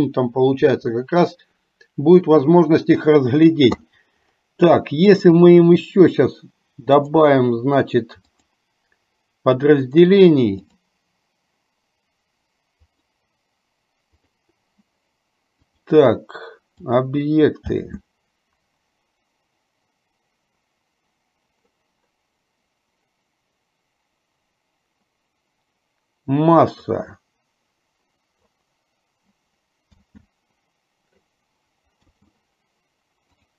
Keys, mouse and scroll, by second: 5.5 click, 7.1-8.8 drag, 10.0-11.1 right drag, 13.0 click, 14.2 click, 15.8-17.2 drag, 18.0 space, 28.7-33.5 drag.